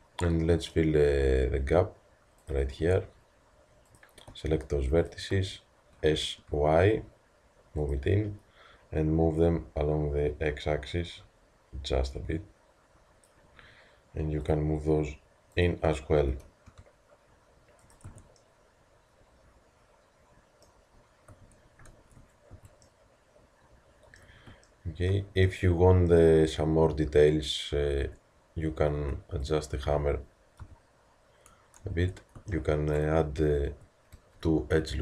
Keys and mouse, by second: 2.5 click, 2.8 Tab, 5.9 s, 6.6 click, 9.3-11.2 drag, 14.5-18.1 drag, 16.3 s, 18.1 Tab, 20.9-21.4 middle drag, 21.4 Tab, 22.0 Tab, 22.5 a, 28.1 Tab, 29.0 Tab, 30.6 KP_3, 31.9 Tab, 33.2 a, 34.1 ctrl+r.